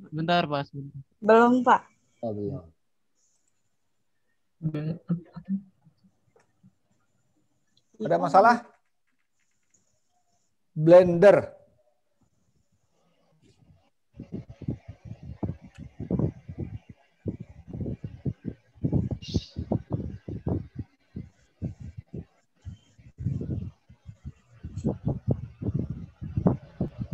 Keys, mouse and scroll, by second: 3.4 click, 18.1-19.9 scroll up 9, 19.9-21.4 scroll down 9, 21.4 scroll up 1, 21.5-22.3 scroll down 2, 22.3-23.2 scroll up 2, 24.9 click.